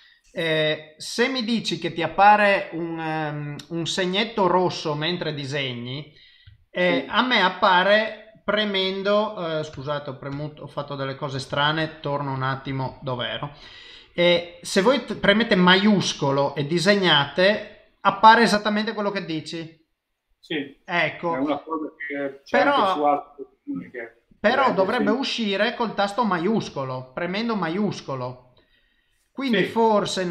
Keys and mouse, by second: 9.7 Tab, 11.6 Tab, 24.6 shift+click, 29.0 middle click.